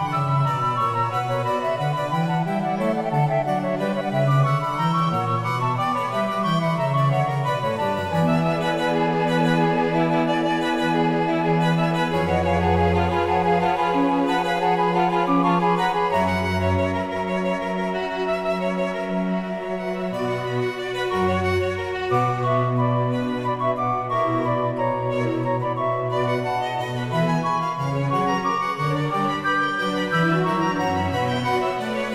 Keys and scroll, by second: 16.4 g, 27.9 ctrl+k.